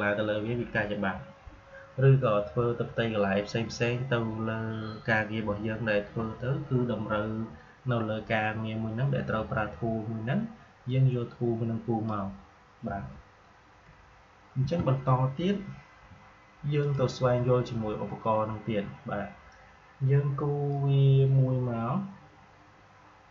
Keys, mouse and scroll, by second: 10.8-14.5 drag, 14.5 Delete, 16.7 click, 20.6-23.3 drag.